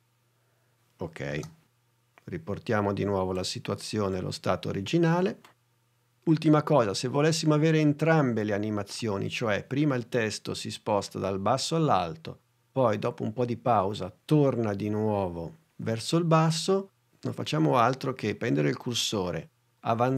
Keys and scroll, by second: 1.3 space.